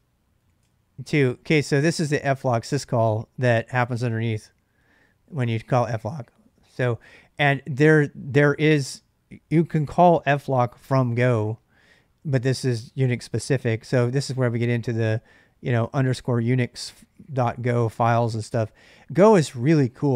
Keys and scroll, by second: 0.0-0.7 typing.